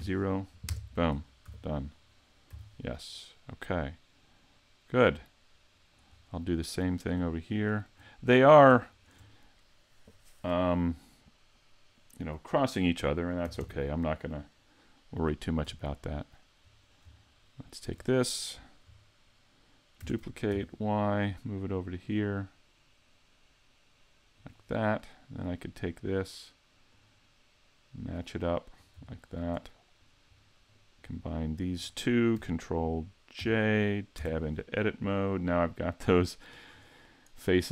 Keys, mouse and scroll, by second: 1.4 a, 1.9-2.5 scroll down 4, 2.5 z, 3.0 middle click, 6.1 scroll up 3, 6.9 right click, 7.5 shift+right click, 8.3 right click, 8.9 shift+right click, 13.6 ctrl+KP_3, 15.6 z, 17.5 shift+middle click, 20.0 shift+d, 24.5 click, 25.3 right click, 26.9 click, 28.7-29.1 scroll up 3, 29.1 shift+middle click, 30.0 right click, 30.3 scroll down 2, 31.4 shift+right click, 33.4 ctrl+j, 34.2 Tab, 35.8-36.6 scroll down 2, 36.7 scroll up 2.